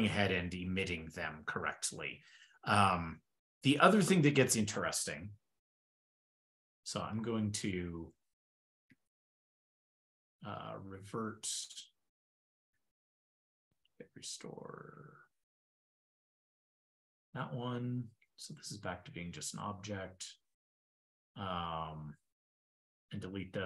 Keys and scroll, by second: 7.1 ctrl+super+Return, 7.9 ctrl+a, 8.0 ctrl+k, 16.3 super+v, 19.3 super+Tab.